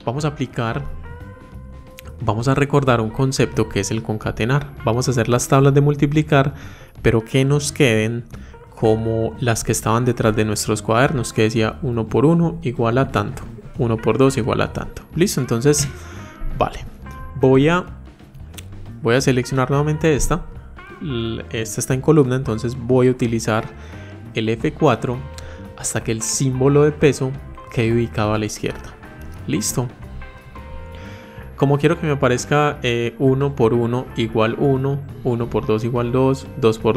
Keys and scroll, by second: 22.0 F4.